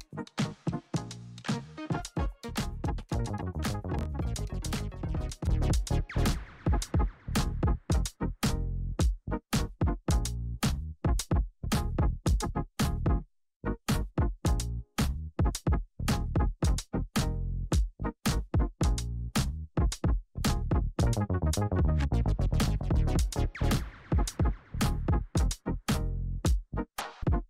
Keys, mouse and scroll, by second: 1.0 click, 5.6 Return, 6.3 click, 9.4 Return, 10.5 click, 15.5 ctrl+d, 17.1 ctrl+0, 18.9 click, 20.2-24.6 alt+drag, 24.7 shift+Num_Lock, 24.7 alt+click, 25.9 r, 26.8-27.4 drag.